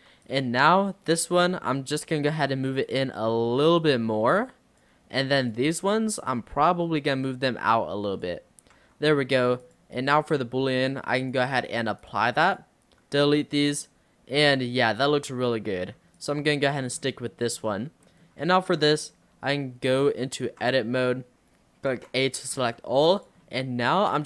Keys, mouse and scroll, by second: 0.0 Tab, 0.3 click, 0.7 scroll up 2, 1.6 l, 2.9 click, 5.4 click, 5.9 l, 6.5 l, 7.3 click, 8.8 Tab, 9.0 scroll down 1, 9.1-9.6 middle drag, 9.6 click, 11.3-12.1 drag, 12.5 click, 13.2 x, 13.8-15.2 middle drag, 15.2 scroll down 4, 15.5-16.2 middle drag, 16.2 click, 16.5-16.9 middle drag, 16.9-17.5 scroll down 3, 17.5-18.1 scroll down 4, 18.1-20.0 middle drag, 20.0 click, 20.5 Tab, 22.0 a, 22.6 g, 23.5 shift+middle click.